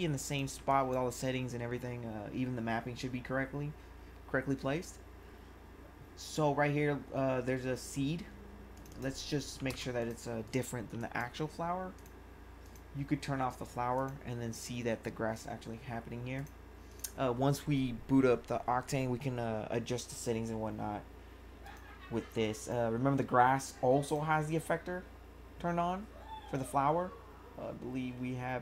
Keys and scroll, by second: 0.5 1, 9.3-10.9 typing.